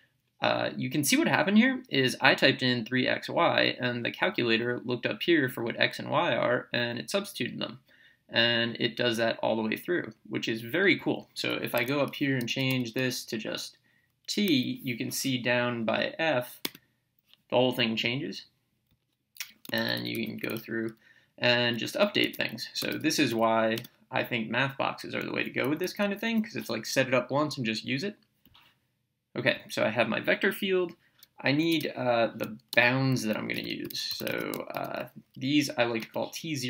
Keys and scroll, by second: 12.5 BackSpace, 16.6 Return, 22.2-23.8 typing, 25.3 Down, 25.6 Left, 31.7 BackSpace, 33.8-34.8 typing, 36.0 Return.